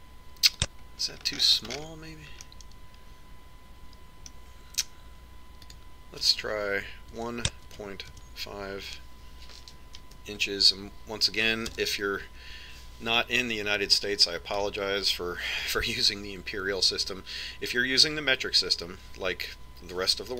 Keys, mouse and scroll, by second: 0.5 click, 2.6-6.0 middle drag, 7.4 click.